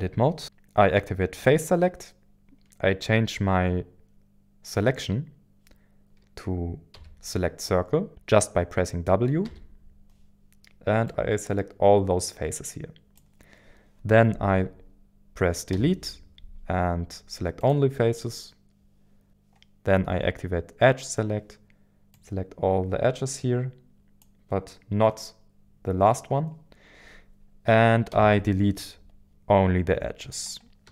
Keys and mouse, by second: 6.9 w, 9.4 w, 11.1-13.2 drag, 15.7 Delete, 22.1-24.2 drag, 28.1 Delete.